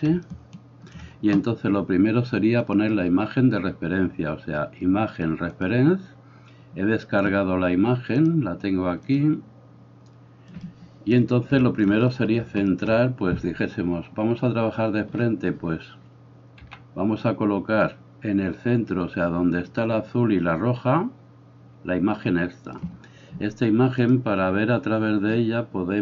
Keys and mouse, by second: 2.7-22.7 drag, 16.6 g, 22.7-24.0 middle drag, 24.0-26.0 drag.